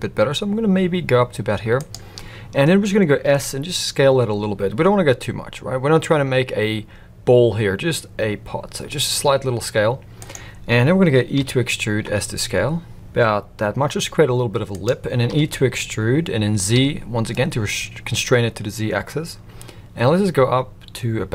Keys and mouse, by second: 3.2 s, 11.3 e, 15.3 e.